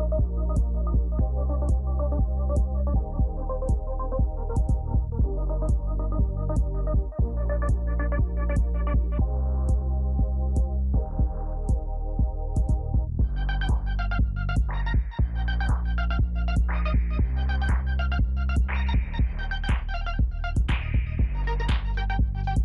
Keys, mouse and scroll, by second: 2.9 Down, 3.3 Down, 3.6 Down, 3.9 Down, 4.2 Down, 6.7-7.4 Down, 7.7 Down, 8.1 Down, 10.4 Down, 12.5 Down, 13.2 Up, 13.7 Down, 14.8 Up.